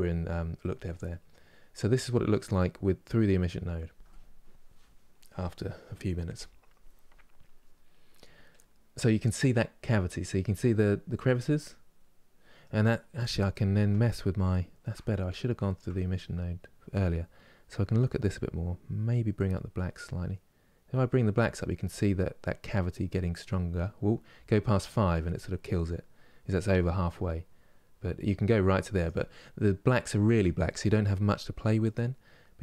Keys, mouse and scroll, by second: 8.2 middle click, 8.9 scroll up 2, 11.2-15.4 middle drag, 15.4 shift+scroll down 1, 19.3-32.6 drag.